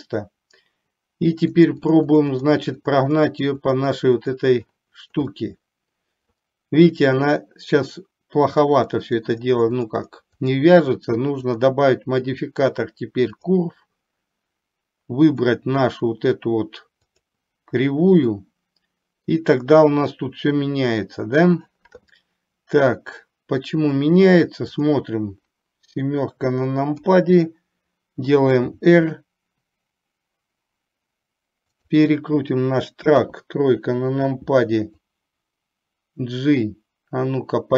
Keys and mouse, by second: 1.6 click, 2.1 click, 2.5 click, 2.9 click, 3.1 click, 3.7 click, 4.0 click, 5.4-6.4 middle drag, 9.1 click, 9.6 click, 10.1 click, 10.6 click, 11.7-13.7 drag, 18.4-19.5 middle drag, 25.0 click, 27.1 KP_7, 28.7 r, 33.4 KP_3, 35.2-37.7 drag.